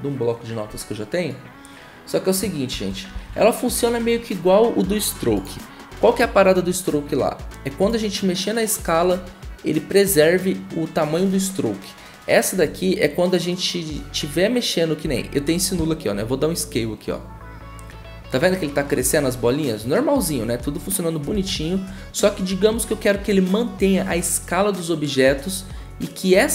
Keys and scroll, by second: 2.7 ctrl+c, 3.1 ctrl+c, 15.7 s, 21.3 ctrl+z.